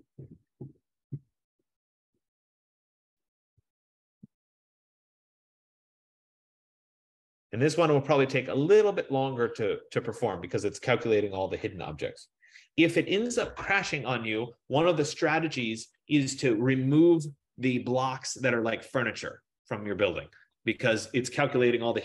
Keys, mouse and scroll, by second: 3.8 click, 8.4 F15.